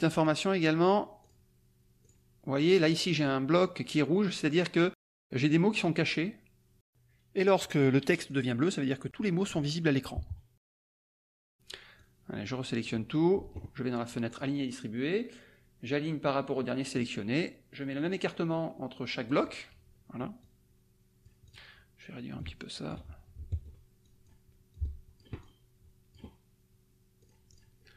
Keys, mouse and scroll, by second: 0.1 click, 1.2 click, 2.0 click, 5.8-7.1 drag, 10.1 click, 11.3 click, 11.9 click, 14.3 click, 16.9 click, 19.2 click, 20.4 click, 21.5 click, 22.3 ctrl+click, 24.0 shift+click, 24.7 ctrl+click, 25.4 ctrl+click, 27.2 click.